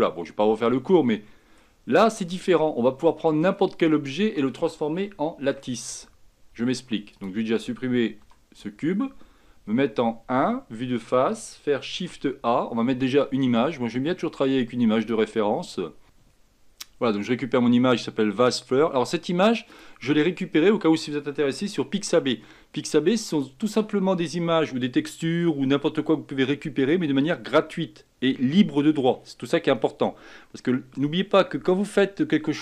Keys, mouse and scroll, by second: 0.8-5.5 middle drag, 5.5 x, 7.2-8.3 drag, 8.3 Delete, 9.8 KP_1, 12.0 shift+a, 22.1 s.